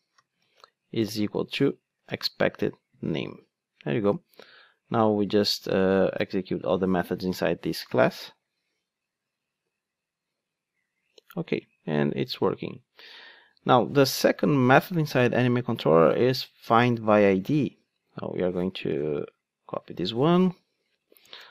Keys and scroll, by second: 6.4 Return, 6.6 ctrl+shift+d, 20.3 super+c.